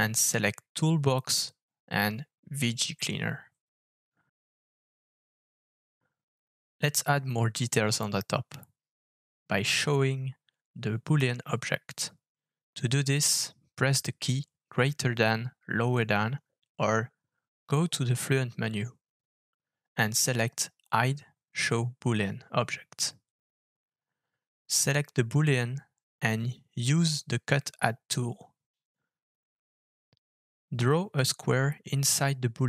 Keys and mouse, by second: 6.1-9.3 middle drag, 9.3 Tab, 10.2 Tab, 11.4 alt+f, 13.2-13.8 shift+drag, 14.0-15.1 middle drag, 15.2-15.5 shift+middle drag, 17.4 alt+f, 25.0 click, 26.0-26.8 shift+middle drag, 27.9 alt+f.